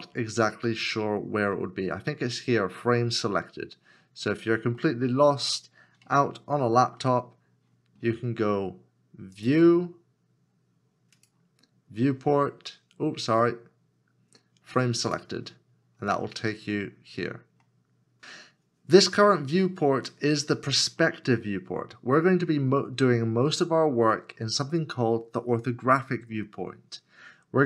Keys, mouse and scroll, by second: 4.8 scroll down 1, 4.9 middle click, 6.2 shift+middle click, 16.1 middle click, 16.9 scroll down 1, 17.8 middle click, 19.5 middle click, 19.5 scroll down 1, 21.0 middle click.